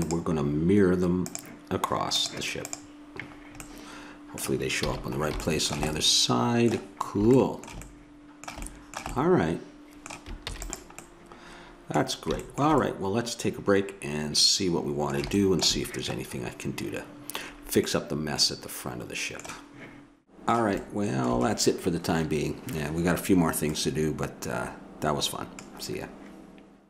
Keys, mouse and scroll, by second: 3.7 middle click, 5.0 a, 10.5 ctrl+s, 18.0-19.9 middle drag, 20.3-24.2 middle drag.